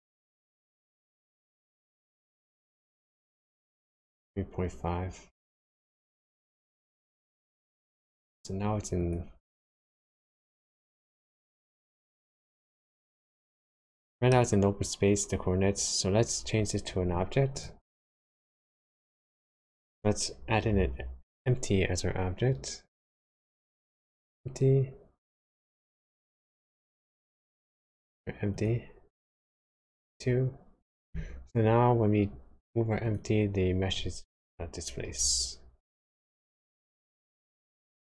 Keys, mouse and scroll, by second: 9.0 click, 10.2 g, 13.4 middle click, 16.0-16.4 scroll down 1, 17.5 click, 20.8 shift+a, 26.4 click, 28.6 click, 33.0 click, 35.0 g.